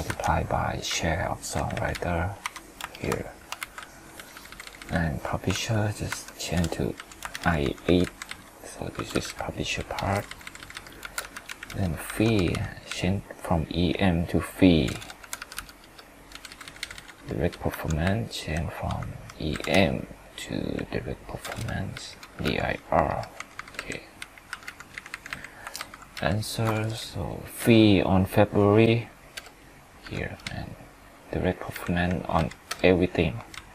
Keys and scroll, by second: 0.1 F2, 2.4 F4, 2.9 ctrl+Return, 3.6 ctrl+c, 5.5 ctrl+v, 6.1 F2, 7.3 ctrl+Return, 12.1 F2, 17.7 F2, 25.7 ctrl+Up.